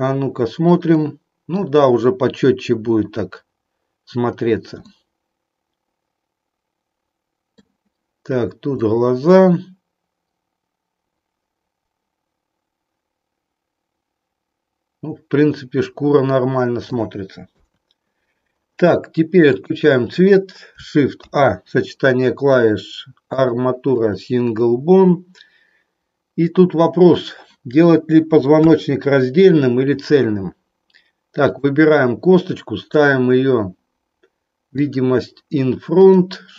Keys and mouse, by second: 0.0 click, 1.0 middle click, 4.9-7.8 middle drag, 8.9-16.9 middle drag, 17.5 KP_1, 21.0 shift+a, 28.5 KP_3, 34.9 click, 36.0 click.